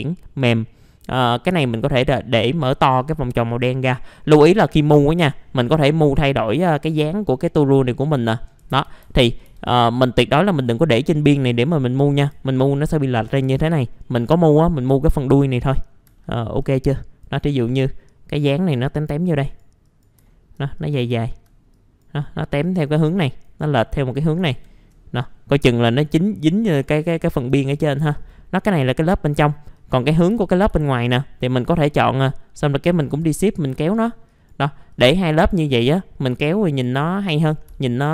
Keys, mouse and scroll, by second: 0.7 middle click, 1.6-2.9 ctrl+drag, 3.5-4.7 drag, 8.7 ctrl+z, 9.0 ctrl+z, 9.5 ctrl+z, 10.0 middle click, 11.2 click, 12.0 scroll up 1, 12.4 alt+middle click, 13.4 ctrl+z, 13.8 middle click, 13.8 scroll down 1, 14.9 click, 15.9 scroll up 1, 16.2 alt+middle click, 16.9 click, 20.2 alt+middle click, 20.8 click, 21.2 alt+middle click, 21.7 click, 24.1-24.4 scroll up 1, 24.5 ctrl+z, 25.2 middle click, 25.7 click, 26.7 right click, 27.1 alt+scroll down 1, 27.9 F4, 28.2 click, 30.3 F4, 30.7 scroll down 1, 30.8 alt+middle click, 31.8 click, 32.8 scroll up 1, 33.1 click, 36.4 alt+middle click, 36.9 alt+middle click, 37.3 F4, 37.7 alt+middle click.